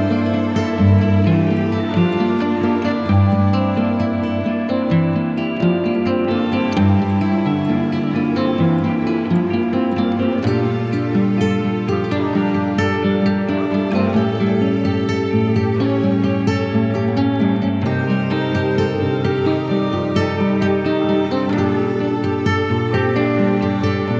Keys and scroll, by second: 5.4 space, 5.9 z, 15.9 z, 18.0 v.